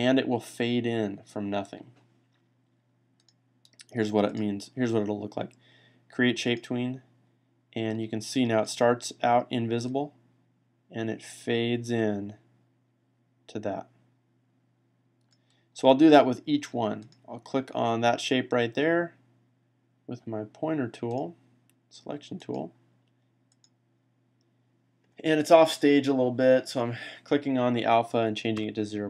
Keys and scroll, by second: 28.4 0.